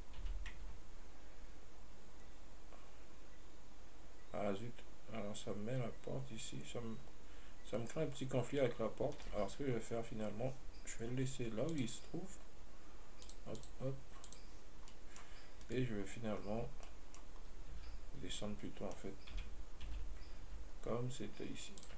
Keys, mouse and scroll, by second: 9.9 scroll down 2, 12.0 click, 13.5 click, 13.8 click, 14.5 click, 15.2-15.9 middle drag, 15.9 right click, 17.1-17.6 middle drag, 17.6-18.0 scroll down 1, 18.0 Tab, 18.3-18.6 scroll up 1, 18.6-19.6 middle drag, 19.6 g.